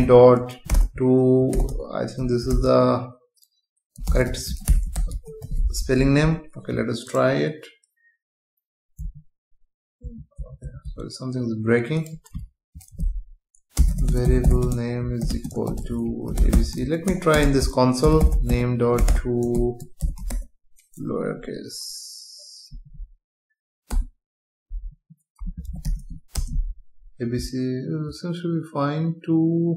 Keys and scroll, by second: 6.0 ctrl+s, 9.0 F5, 14.1 space, 17.3 Return, 20.0 BackSpace, 21.3 Down, 23.9 Return, 24.8 Up, 26.3 Return.